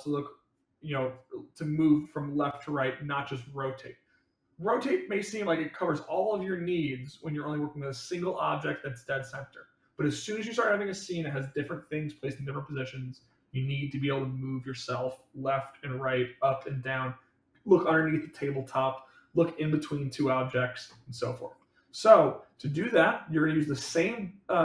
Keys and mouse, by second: 4.9-7.0 middle drag, 21.5-23.0 middle drag.